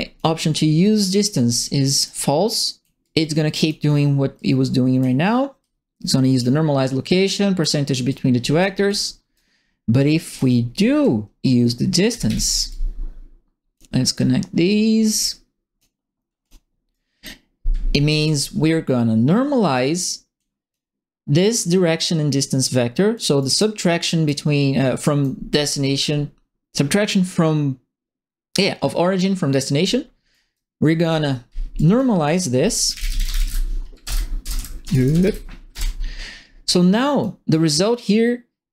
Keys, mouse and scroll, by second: 0.8 right click, 1.2 click, 2.0 click, 3.0 click, 4.3 click, 5.6 click, 7.3 right click, 8.0 click, 8.8 right click, 10.2 click, 12.0 ctrl+c, 12.2 ctrl+v, 12.6-13.7 drag, 14.6-15.7 drag, 16.4 click, 16.9 right click, 20.3 click, 23.1 click, 23.4 right click, 24.0 right click, 25.0 right click, 30.3 right click, 31.7 click, 32.6-35.2 typing, 35.7 Return, 36.8 click, 37.5 right click.